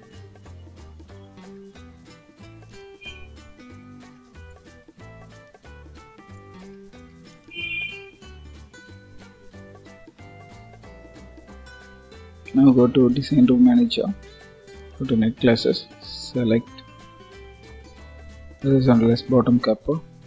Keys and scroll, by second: 9.8 ctrl+s.